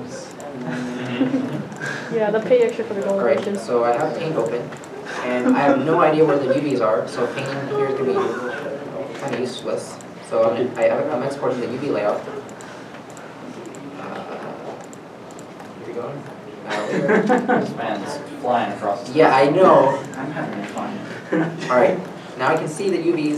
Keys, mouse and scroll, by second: 3.5 alt+Tab, 4.5 alt+shift+Tab, 10.2 alt+shift+Tab, 12.9 alt+Tab, 13.6 alt+Tab, 13.7 alt+Tab, 13.7 alt+Tab, 14.3 alt+Tab.